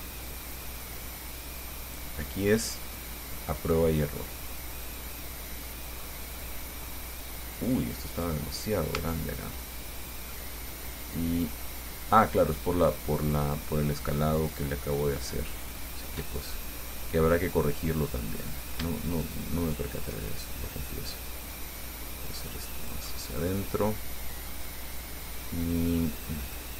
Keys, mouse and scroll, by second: 0.5-2.4 drag, 2.4-3.0 scroll down 4, 3.2-6.1 drag, 6.3 scroll up 2, 6.6-8.4 drag, 8.6-9.0 scroll up 2, 9.2 Tab, 10.5-12.3 drag, 16.6 click, 16.9-18.0 middle drag, 18.5 right click, 19.3 shift+right click, 19.9 shift+right click, 20.7-23.3 shift+drag, 23.6-24.9 drag, 25.7 click, 26.5-26.7 scroll up 1.